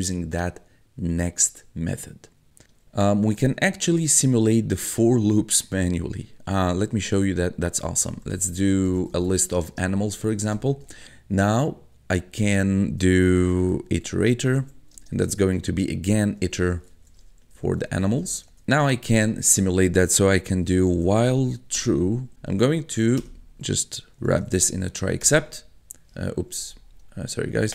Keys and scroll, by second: 7.7-11.0 typing, 13.0-18.9 typing, 20.3-21.8 typing, 22.3 Return, 22.7 Tab, 23.2-25.2 typing, 25.3 Return, 26.6 Up.